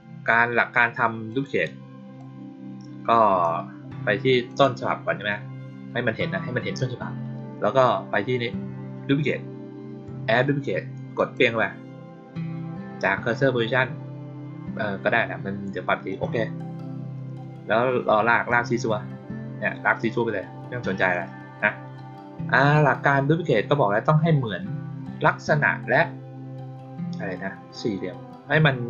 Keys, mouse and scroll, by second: 1.2 click, 2.1-3.3 drag, 4.4 click, 11.1 click, 16.0 click, 18.4-21.0 drag.